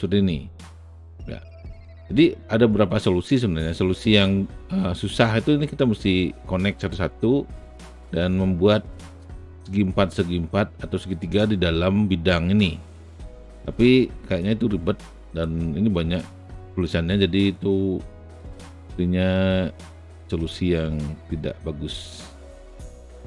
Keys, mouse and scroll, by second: 14.1 alt+right click, 14.3 alt+middle click, 14.4 alt+right click, 14.7 alt+click, 15.1 alt+right click, 15.2 alt+click, 19.3 alt+click, 19.5 alt+middle click, 19.6 alt+click, 19.7 alt+middle click, 21.3-23.0 alt+drag.